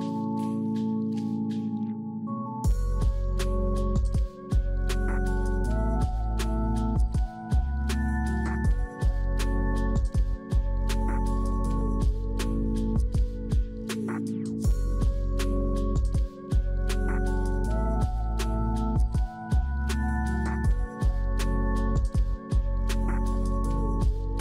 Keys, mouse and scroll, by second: 0.0 scroll down 2, 0.3 middle click, 1.2 ctrl+alt+click, 2.3-3.1 scroll up 6, 3.1-6.1 scroll down 3, 11.0 shift+click, 15.0-15.4 scroll down 4, 15.4 middle click, 15.6 middle click, 18.6 ctrl+alt+click, 21.0 middle click, 21.4 middle click, 21.9-22.3 scroll down 1, 22.3 scroll up 7, 23.0-24.4 scroll down 6.